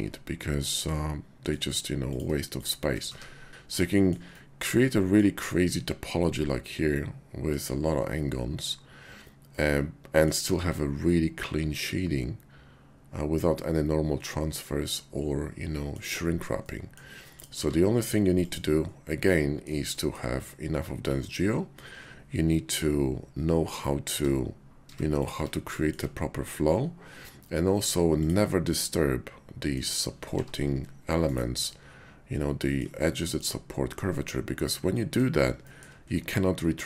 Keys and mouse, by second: 0.5 click, 1.1 middle click, 2.0 click, 3.0 1, 3.9 shift+click, 4.3 middle click, 6.2-7.6 middle drag, 9.4 click, 9.5 middle click, 10.4 Tab, 11.1-16.0 middle drag, 16.6-16.9 middle drag, 17.6 q, 19.2-19.6 drag, 19.9 shift+drag, 24.1 Tab, 24.8 Tab, 25.2 click, 25.3 Tab, 25.9 shift+click, 27.7 Tab, 28.1 click, 28.7-29.7 drag, 30.3 g, 31.3 click, 31.6-32.8 drag, 34.6 middle click, 35.6 shift+click.